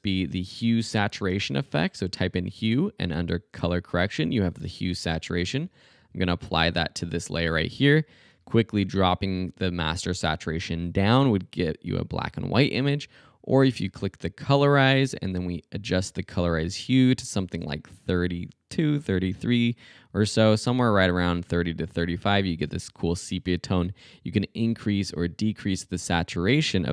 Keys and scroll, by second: 0.1-1.1 typing.